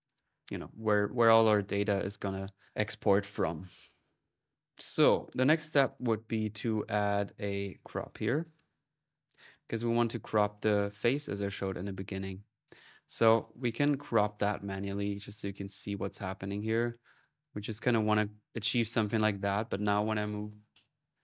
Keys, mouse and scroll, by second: 0.5 middle click, 0.6 click, 0.6 c, 3.1-5.0 typing, 3.4-7.8 alt+drag, 7.8-9.1 right drag, 9.1-10.5 drag, 9.1 typing, 10.0 middle click, 10.0 right click, 11.0 click, 13.2-17.2 drag, 17.4-19.5 drag.